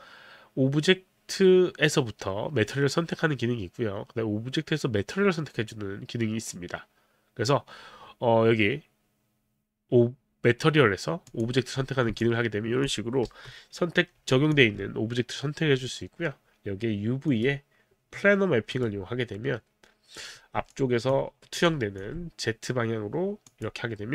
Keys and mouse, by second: 11.3 click, 12.2 alt+click, 13.2 b, 14.3 alt+click, 17.3 click, 18.7 click, 20.7 alt+click, 21.6 alt+click, 23.5 click.